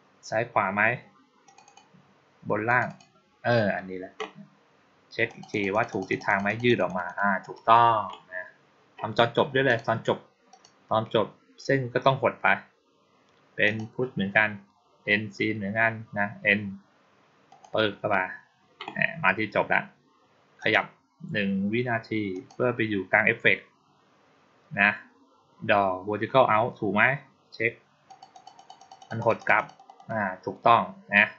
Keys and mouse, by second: 1.3 click, 1.5 click, 2.5 click, 2.7 click, 5.1 click, 5.4 click, 5.6 click, 5.8 click, 6.0 click, 6.1 click, 6.3 click, 6.5 click, 6.7 click, 6.9 click, 7.3 click, 9.5 click, 10.4 click, 13.5 click, 17.3 click, 20.4 click, 22.2 click, 27.9 click, 28.2 click, 28.4 click, 28.6 click, 28.8 click, 29.0 click, 29.2 click, 29.4 click, 29.6 click, 29.8 click.